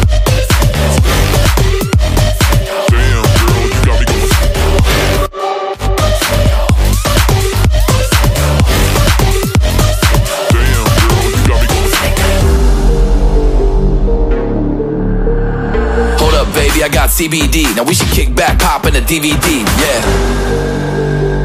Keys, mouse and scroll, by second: 2.5-3.4 typing, 6.6-7.6 typing, 9.4-10.4 typing, 11.6 double click, 14.0-14.8 typing, 15.5 alt+scroll down 1, 15.6 alt+scroll up 1, 17.3 ctrl+z, 18.4 double click, 19.5 ctrl+z, 19.7-21.4 typing.